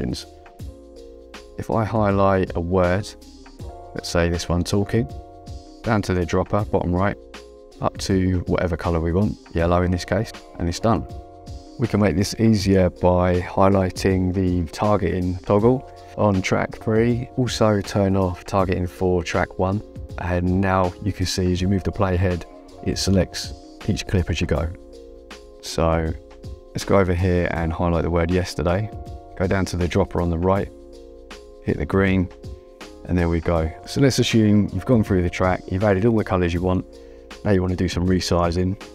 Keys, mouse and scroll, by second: 0.9 click, 3.6 click, 8.0 click, 9.6 click, 14.7 click, 22.1 click, 26.2 click, 29.1 click, 31.3 click, 32.7 click, 36.1 click.